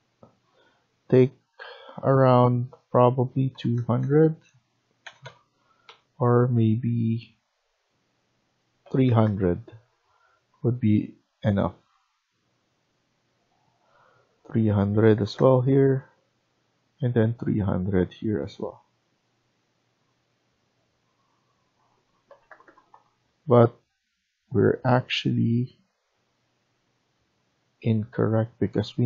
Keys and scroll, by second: 3.4 typing, 5.0 BackSpace, 5.1 BackSpace, 5.8 BackSpace, 8.5-9.3 typing, 14.8-16.8 typing, 15.8 Return, 22.3-23.7 typing, 22.8 Return.